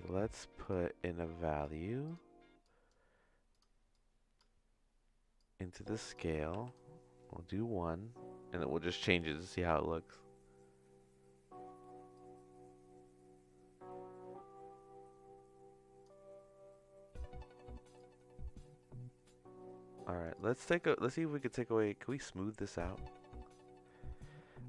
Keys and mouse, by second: 2.6-3.6 drag, 3.9 click, 5.3 click, 6.1-10.9 drag, 12.2-16.0 drag, 18.1-20.2 drag, 20.3 click, 21.1-24.6 drag.